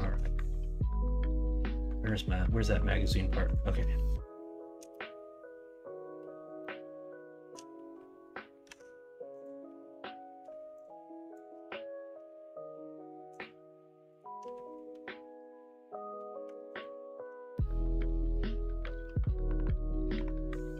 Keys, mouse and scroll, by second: 6.6-7.5 shift+middle drag, 8.6 Tab.